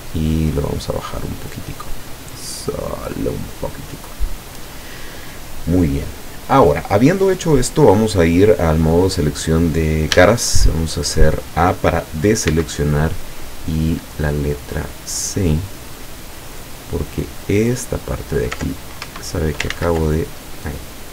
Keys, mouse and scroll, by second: 3.9 middle click, 4.7 scroll down 1, 5.0 middle click, 6.3 scroll up 1, 8.2 click, 10.2 a, 12.6 c, 13.4-13.7 scroll up 2, 14.0 scroll up 2, 16.3 scroll down 2, 17.4 click, 19.1 ctrl+Escape, 19.8 ctrl+z.